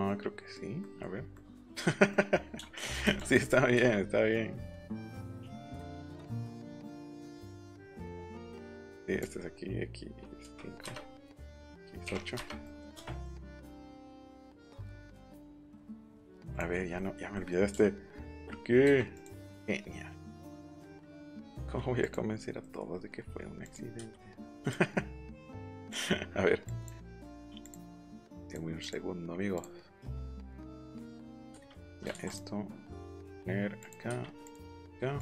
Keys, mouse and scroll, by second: 0.8 middle click, 1.3 middle click, 3.1 click, 3.8 q, 6.3 click, 7.5 click, 8.7 click, 10.4 5, 10.8 Return, 11.5 x, 12.0 8, 12.3 Return, 13.5 click, 14.1 middle click, 16.5 click, 16.9 middle click, 17.3 middle click, 19.1 click, 20.5 click, 21.4 click, 21.9 click, 22.6 middle click, 23.6 click, 24.6 click, 25.5 click, 25.8 click, 26.6 click, 27.2 ctrl+z, 27.6 click, 28.4 click, 28.7 click, 29.5 click, 30.5 click, 31.1 click, 32.1 ctrl+z, 32.2 click, 33.8 click, 34.4 click, 35.1 click.